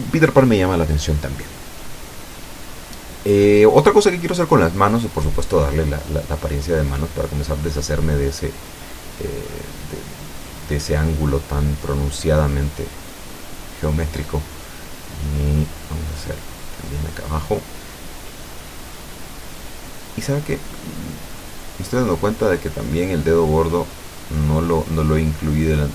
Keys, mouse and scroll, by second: 0.0 click, 0.5 scroll down 1, 0.9 middle click, 2.5 shift+middle click, 3.5-4.3 shift+scroll up 5, 4.3 shift+middle click, 5.1 shift+middle click, 5.9-9.2 drag, 9.3-10.9 middle drag, 11.2 click, 12.3 click, 13.2 click, 13.9 middle click, 14.6-15.9 ctrl+drag, 16.0 ctrl+click, 17.5 ctrl+click, 18.4 ctrl+click, 19.0 ctrl+click, 19.8-21.4 ctrl+middle drag, 21.4-22.0 scroll up 1, 22.0 middle click, 23.1 Tab, 24.8 middle click, 25.8 a.